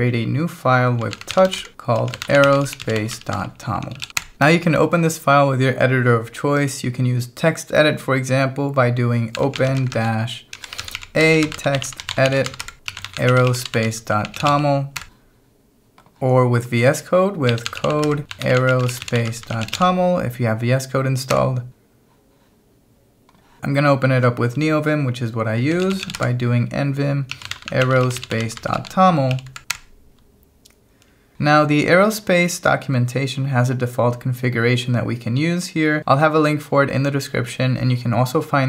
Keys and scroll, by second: 0.8-4.5 typing, 9.1-15.0 typing, 17.3-20.3 typing, 21.3 Return, 25.5-29.3 typing, 29.7 Return.